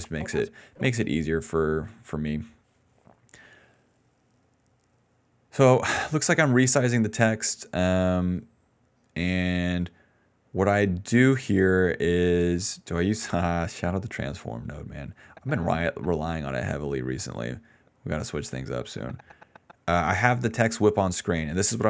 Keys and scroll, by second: 0.4 space, 4.7 d.